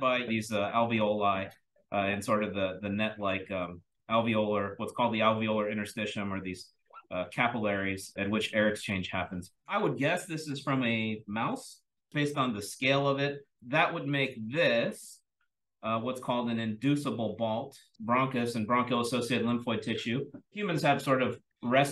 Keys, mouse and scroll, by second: 1.3-3.1 scroll down 1, 3.1-5.4 scroll down 1, 3.8 click, 5.4-8.8 scroll down 1, 8.8-11.0 scroll down 1, 11.0-12.1 scroll down 1, 12.1-13.5 drag, 12.1-13.0 scroll down 1, 13.0-13.5 scroll down 1, 13.5-14.2 scroll up 1, 14.2-14.6 drag, 14.2-16.1 scroll up 1, 16.1-17.7 scroll up 1, 17.7-20.5 scroll up 1, 20.5-21.9 scroll up 1.